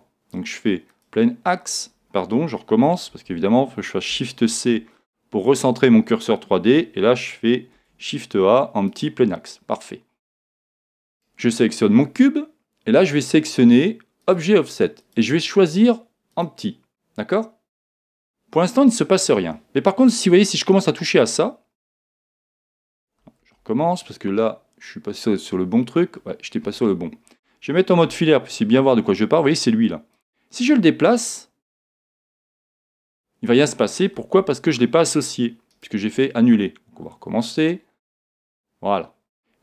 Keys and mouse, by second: 3.1 super+z, 4.5 shift+c, 7.8 shift+a, 11.1 right click, 14.2 click, 20.7 click, 23.4 super+z, 25.2 click, 28.1 z, 30.1 click, 34.4 super+z, 37.4 click.